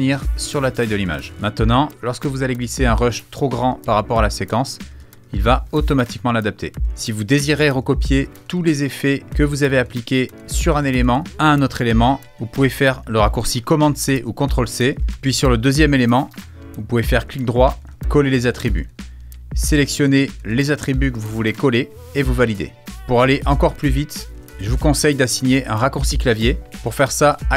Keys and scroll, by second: 14.0 super+c, 23.1 super+z.